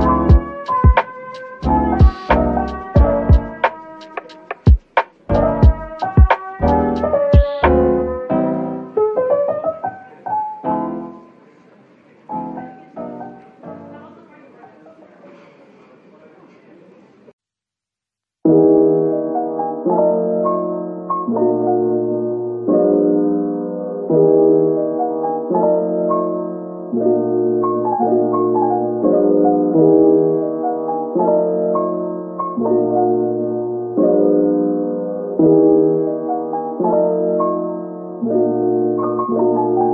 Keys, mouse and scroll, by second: 0.0-0.8 typing, 0.2 scroll down 1, 2.6 scroll up 1, 3.2-3.9 typing, 6.2 Tab, 6.7-7.4 typing, 20.3 scroll up 1, 31.4 typing, 34.0 double click.